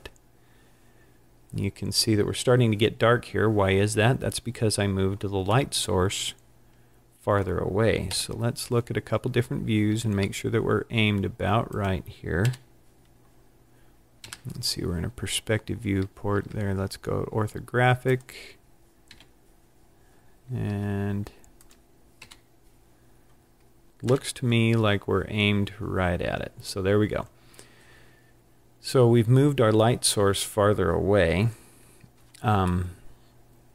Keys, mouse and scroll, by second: 1.4-1.8 scroll up 5, 2.2 scroll up 1, 5.8 middle click, 8.1 KP_7, 9.3-10.2 scroll up 5, 10.2 r, 11.9 click, 12.5 KP_1, 14.3 KP_5, 15.3-15.6 scroll down 2, 15.8-16.4 scroll up 3, 16.4 r, 18.3 click, 19.2 KP_3, 20.8 r, 21.7 click, 22.3 KP_1, 24.2 KP_7, 32.8 scroll down 4, 32.9 middle click.